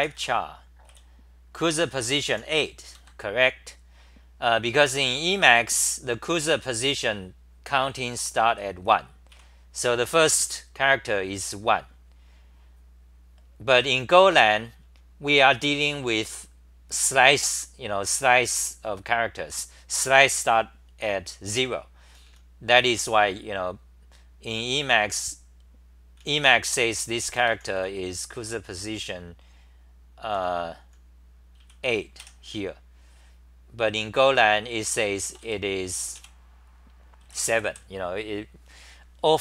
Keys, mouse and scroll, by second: 0.9-3.0 typing, 8.5-9.3 typing, 15.1-16.3 typing, 22.0 t, 22.2 t, 25.9-27.3 typing, 30.3 n, 30.8 h, 31.6 w, 32.2 2, 37.0-38.0 typing.